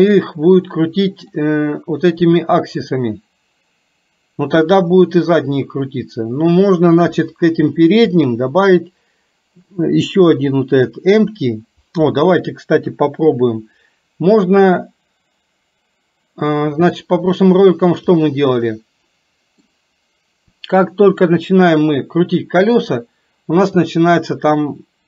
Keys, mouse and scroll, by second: 12.9 KP_3, 17.0 middle click, 18.9 middle click.